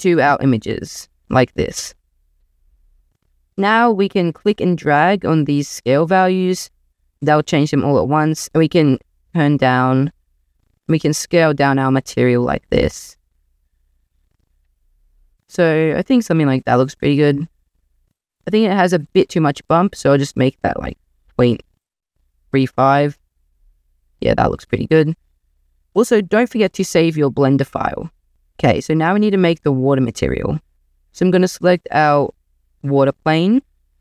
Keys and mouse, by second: 0.1 drag, 1.2 click, 4.4-6.5 drag, 6.5-7.8 middle drag, 7.8 click, 10.6 middle click, 11.0 click, 11.2 middle click, 11.3 click, 11.4 middle click, 12.8 middle click, 13.1 middle drag, 13.5 middle click, 16.9 click, 17.8 middle click, 20.1-23.2 drag, 24.9 ctrl+s.